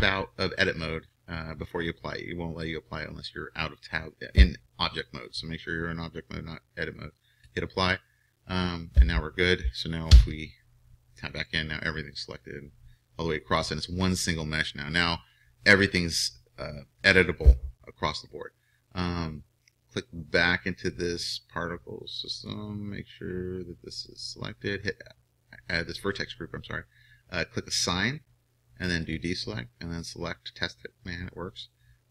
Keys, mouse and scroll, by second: 7.5-10.1 drag, 10.1 Tab, 22.4-32.1 drag.